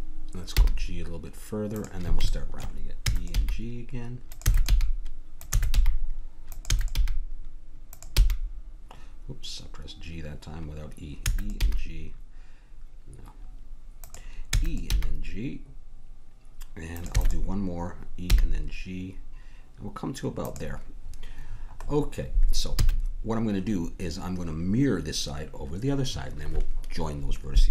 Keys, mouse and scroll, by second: 0.5 g, 2.3 click, 3.0-7.1 typing, 8.1 g, 11.6 g, 14.5 e, 15.0 g, 17.1 e, 18.4 g, 21.0-25.9 middle drag, 22.8 a.